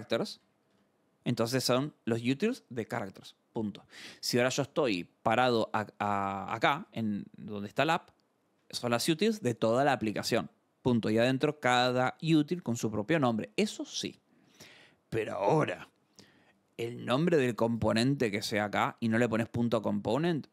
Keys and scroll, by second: 0.1 k, 0.7 Return, 4.8-7.3 typing, 7.6 Return, 14.4 alt+Tab.